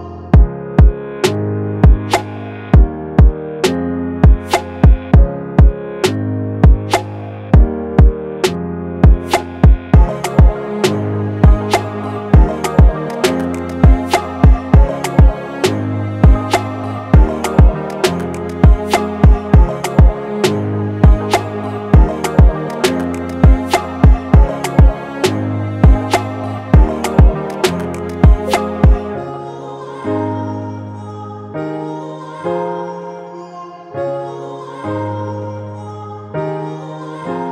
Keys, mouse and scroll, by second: 3.8 click, 6.0 click, 16.3 click, 16.4 ctrl+h, 19.1 click, 24.1-25.1 drag, 25.6 alt+scroll down 1, 28.1 click, 37.0-37.5 drag.